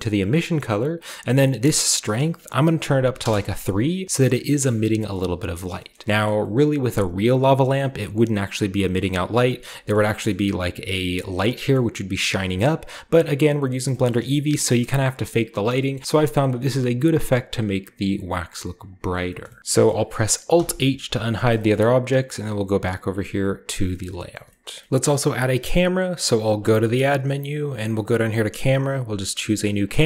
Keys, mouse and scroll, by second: 1.1-4.0 drag, 3.1-4.7 typing, 3.2 Return, 4.0 shift+middle click, 4.0-5.7 shift+scroll down 1, 4.2 shift+middle drag, 4.5-4.9 shift+middle drag, 5.1-5.7 middle drag, 5.7-6.0 scroll down 1, 5.8 middle drag, 6.0-8.6 scroll up 1, 6.1 middle drag, 6.4 middle drag, 6.9-7.6 typing, 7.1-7.6 shift+middle drag, 7.8-8.8 shift+middle drag, 8.6-10.2 scroll down 3, 9.0-9.5 middle drag, 9.4-10.2 typing, 9.7 middle click, 9.9 shift+middle drag, 10.2-11.6 shift+scroll up 1, 10.3-11.6 middle drag, 11.8 middle click, 12.4-13.2 typing, 12.7-13.2 middle drag, 13.9 shift+middle click, 14.1-14.8 middle drag, 15.0-15.8 middle drag, 16.0-21.4 middle drag, 16.0-17.2 scroll up 1, 18.1 shift+right click, 18.1 shift+click, 19.0-19.6 shift+drag, 19.0-19.6 shift+right drag, 19.6 alt+a, 19.6-19.9 scroll down 1, 20.6 alt+h, 21.2 a, 21.5 shift+middle click, 21.7-23.1 middle drag, 23.7-24.5 scroll down 1, 24.0-26.6 shift+middle drag, 24.5-24.9 shift+scroll up 1, 24.9 alt+Left, 26.6 shift+a, 29.8 click.